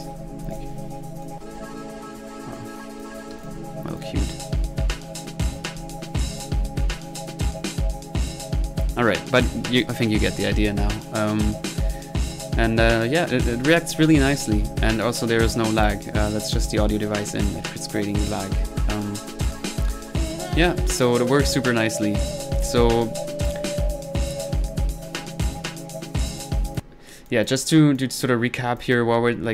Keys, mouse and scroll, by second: 1.2 click, 2.8-3.1 drag, 3.9 click, 4.4-5.7 drag, 14.8-15.2 middle drag, 15.2 click, 15.8-16.3 middle drag, 16.5 drag, 17.9 click, 18.5 middle click, 19.3-21.2 middle drag, 21.5-22.0 drag, 26.7 click, 27.3 click, 28.0 click, 28.4 middle click, 28.8 click.